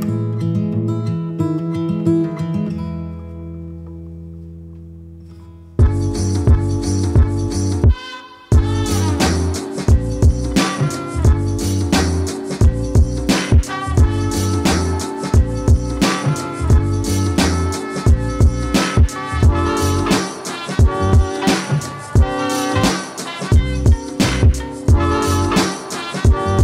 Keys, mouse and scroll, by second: 11.8 click, 15.0-15.5 typing, 16.2 click, 18.0-19.0 typing, 19.9 click, 22.4-23.1 typing.